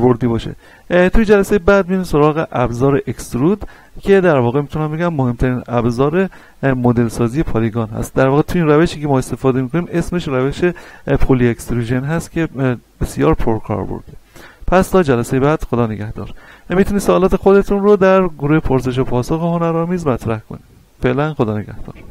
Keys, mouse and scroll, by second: 0.5 z, 1.2-21.9 shift+middle drag.